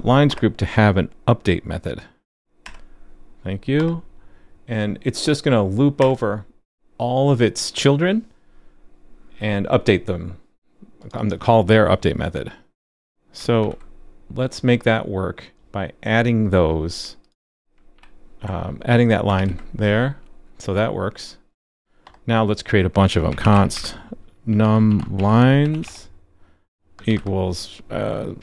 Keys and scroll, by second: 13.6 super+c, 17.9 super+v, 19.3 super+s.